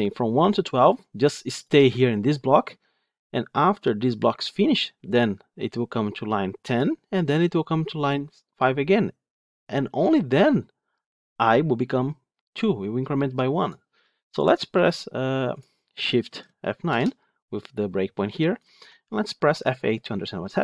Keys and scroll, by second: 6.6 ctrl+F8, 9.9 ctrl+F8, 16.8 shift+F9.